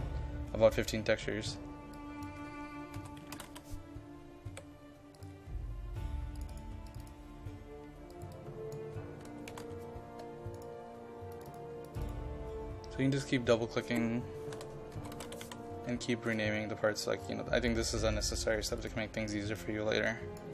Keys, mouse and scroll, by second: 2.7-4.5 typing, 5.2-9.5 drag, 9.0-10.1 typing, 10.6 click, 14.3-16.0 typing, 16.3 click.